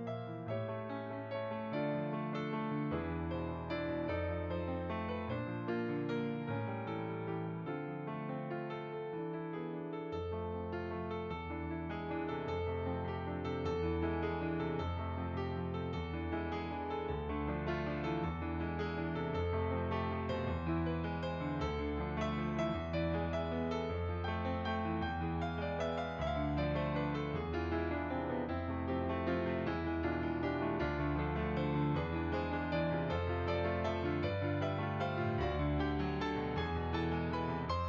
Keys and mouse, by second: 0.8 click, 6.1 click, 7.0 click, 9.5-11.1 right drag, 11.2 click, 12.7 shift+r, 13.8 click, 14.6 ctrl+r, 15.5-18.1 drag, 18.9 f, 19.3 click, 20.1 f, 20.3 click, 23.1 middle click, 23.6 shift+click, 24.5 click, 24.9 middle click, 25.6 shift+click, 26.8 middle click, 27.2 shift+click, 27.6 middle click, 33.8 middle click, 34.8 g, 35.7 click, 36.7 click, 37.6 middle click.